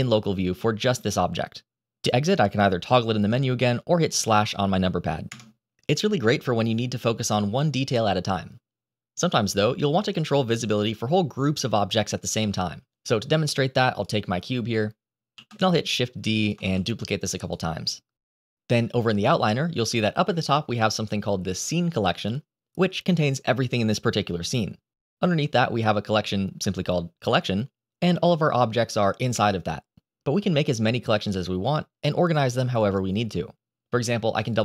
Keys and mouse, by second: 13.9 click, 15.2 shift+d, 15.9 click, 16.0 shift+d, 17.5 shift+d, 34.4-34.6 drag.